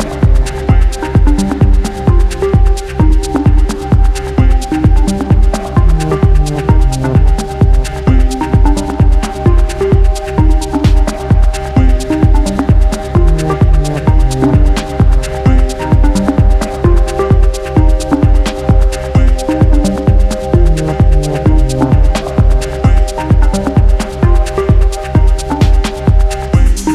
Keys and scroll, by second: 0.0-0.3 typing, 1.7 x, 1.8 Return, 2.7 g, 3.4 space, 5.0 space, 12.5 space, 17.7 o, 19.3 0, 19.6 0, 19.6 Return, 19.9 0, 26.1 space.